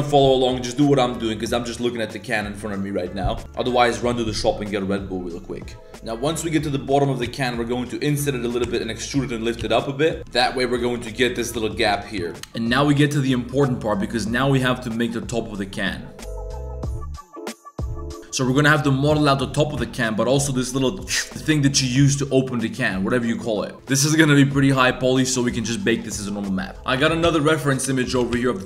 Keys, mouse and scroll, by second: 3.4 shift+s, 5.9 g, 6.8 e, 7.2 s, 8.2 click, 8.6 e, 9.6 s, 10.2 click, 10.2 s, 10.6 3, 11.1 alt+click, 11.3 click, 12.2 z, 26.7 s, 27.0 g, 28.1 g.